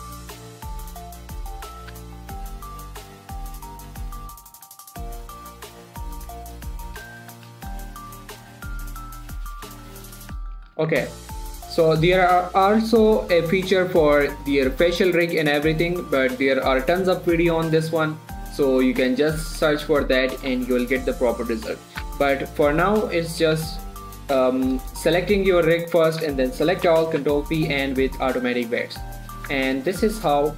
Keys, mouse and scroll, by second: 0.3 shift+middle click, 0.5-0.8 shift+scroll up 2, 1.0 scroll down 2, 1.1 shift+middle click, 1.8 click, 2.3 g, 2.5 x, 3.4 click, 4.2-7.7 typing, 4.8 click, 5.4 click, 6.9 scroll down 1, 7.1 shift+middle click, 8.0 shift+middle click, 8.2-8.7 shift+scroll down 1, 8.7 click, 8.8 g, 9.4 click, 9.7-10.1 scroll down 1, 10.1 click, 10.7 scroll down 1, 10.8 middle click, 11.0 z, 11.2 Tab, 11.4-14.7 middle drag, 16.9 middle click, 18.9-19.3 scroll up 1, 19.3 scroll down 1, 19.5 middle click, 20.2 shift+middle click, 20.8 middle click, 22.4 a, 23.2 click, 23.9 a, 26.0 click, 26.5 a, 27.7 ctrl+p, 28.1 click, 29.8 Tab, 30.4 click.